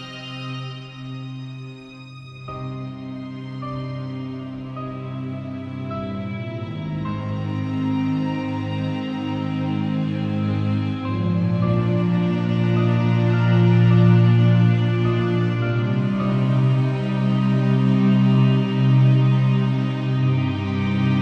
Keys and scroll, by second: 0.3 e, 1.2 [, 4.6 space, 5.2 z, 8.9 space, 9.9 super+v, 11.4 super+l, 13.7 super+u, 16.3 0.